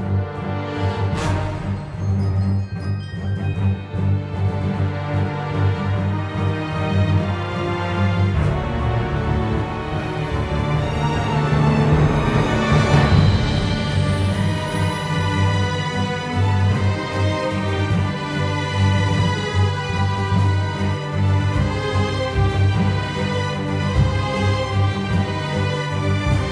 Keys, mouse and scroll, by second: 0.7 ctrl+z, 20.6 e, 21.8 click, 23.7 click, 24.9 click.